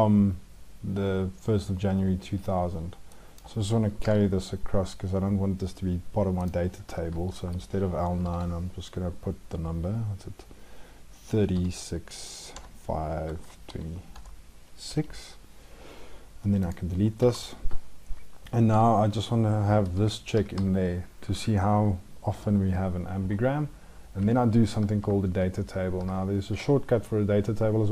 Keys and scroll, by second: 3.8 ctrl+c, 7.4 ctrl+shift+Right, 8.0 ctrl+b, 25.4 ctrl+shift+Down.